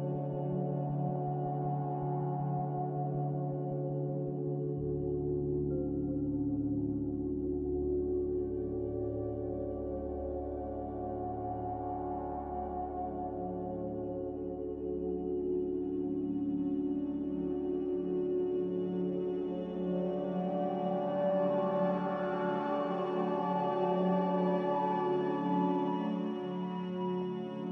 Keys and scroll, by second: 0.8 m, 8.6 a, 27.4 z.